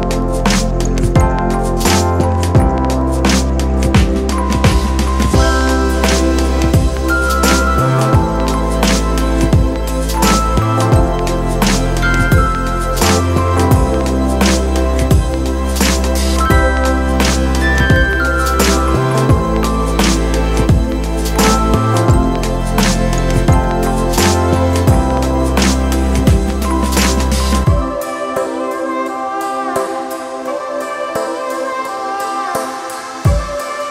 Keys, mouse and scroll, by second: 5.0 [.